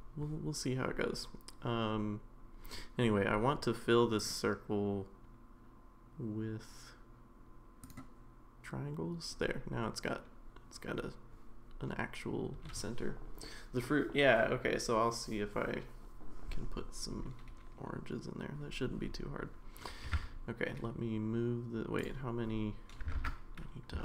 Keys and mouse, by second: 4.2-7.9 drag, 20.0 g, 23.2 ctrl+z.